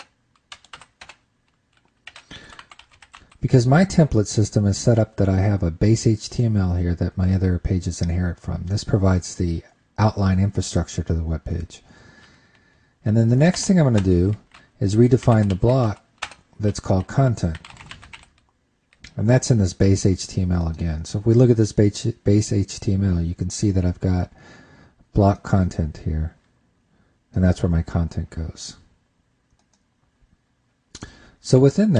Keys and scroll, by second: 14.0 super+Return, 14.4 super+Return.